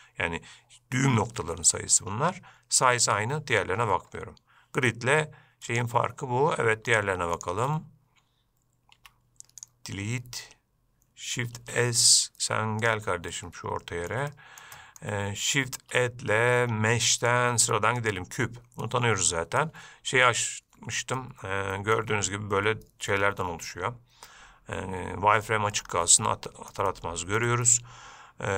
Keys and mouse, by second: 5.2 Escape, 5.9 click, 6.3 Escape, 7.6 shift+click, 9.2 x, 11.8 shift+s, 13.5-14.3 shift+middle drag, 14.5 middle click, 15.0 shift+middle drag, 19.0-19.8 middle drag, 21.4-22.2 middle drag, 23.9-25.7 middle drag, 26.4-26.9 middle drag, 27.1-27.6 shift+middle drag.